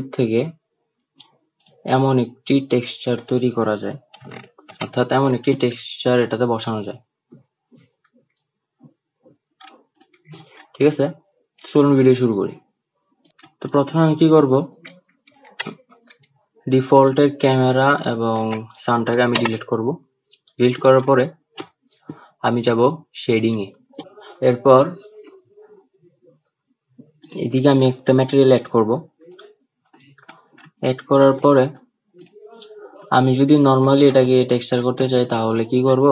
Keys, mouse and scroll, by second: 1.7 click, 6.2-6.8 middle drag, 10.1-10.5 middle drag, 13.4 middle click, 17.2-17.6 drag, 18.1 shift+click, 19.6 Delete.